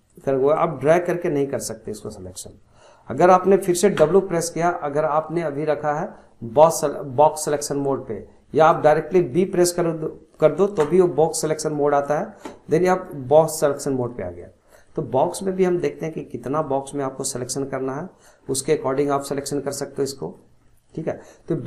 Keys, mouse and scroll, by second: 0.1 click, 1.4 click, 2.0 click, 3.9 w, 5.3-8.5 drag, 9.5-10.8 middle drag, 10.8 b, 12.9 click, 13.7-16.6 middle drag, 16.6 click, 18.4 scroll down 2, 18.6 scroll up 1, 18.7-19.8 middle drag, 19.8-20.2 scroll up 1, 20.2-21.6 middle drag.